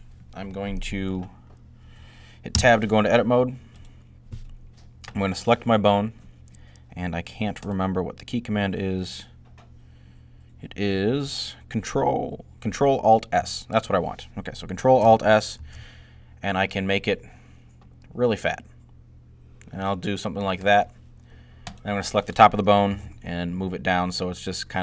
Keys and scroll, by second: 15.4 ctrl+alt+s, 22.5-23.3 typing.